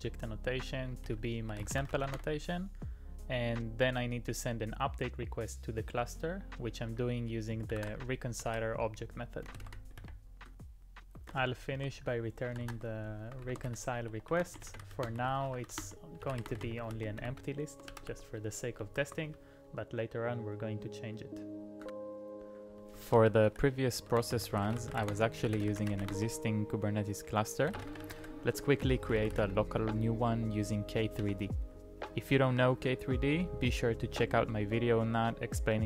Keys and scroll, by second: 0.8-2.6 typing, 7.7-10.1 typing, 11.3 Return, 12.6-18.8 typing, 19.3 ctrl+u, 19.7 ctrl+u, 22.7 ctrl+u, 22.9-29.9 typing, 31.0-31.7 typing.